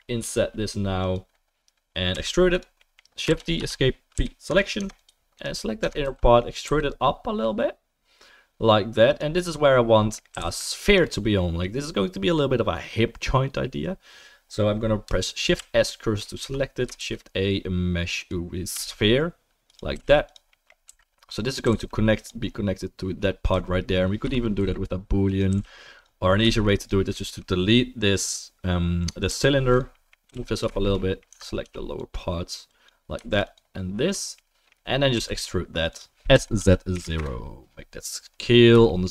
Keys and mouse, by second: 0.2 i, 2.1 e, 3.5 shift+d, 4.1 p, 4.8 Tab, 5.4 click, 5.7-7.3 middle drag, 5.8 Tab, 6.0 a, 6.6 e, 10.3 g, 13.4-32.0 middle drag, 15.5 shift+s, 16.4 Tab, 17.2 shift+a, 18.7 s, 19.9 g, 20.9 s, 21.6 g, 23.5 g, 24.6 s, 25.5 g, 29.3-30.3 typing, 29.7 drag, 31.3 Tab, 31.6 3, 32.0-33.4 drag, 33.4 shift+middle click, 33.4 shift+click, 33.5-39.1 shift+middle drag, 35.1 e, 36.3 s.